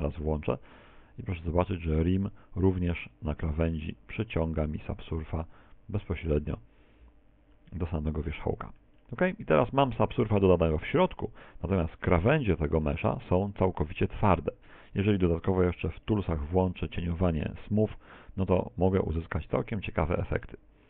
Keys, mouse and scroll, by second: 12.9 click, 20.3 middle click, 20.6 middle click, 20.8 scroll down 5, 20.8 middle click.